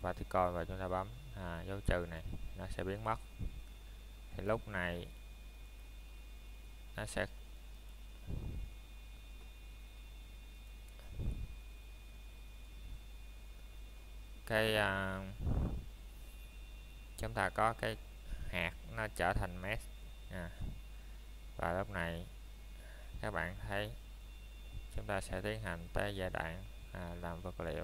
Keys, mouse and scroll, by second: 0.0 middle click, 2.2 click, 2.7 shift+middle click, 4.5 click, 11.6 right click, 12.3 middle click, 12.8-13.1 scroll up 1, 13.2 middle click, 14.0-14.4 scroll down 1, 14.4 middle click, 15.0 scroll up 1, 15.1 middle click, 16.0 scroll down 1, 16.5 middle click, 17.0 shift+middle click, 17.3 scroll up 1, 18.1 shift+middle click, 18.4 scroll down 1, 18.9 middle click, 25.2 click, 25.9 middle click.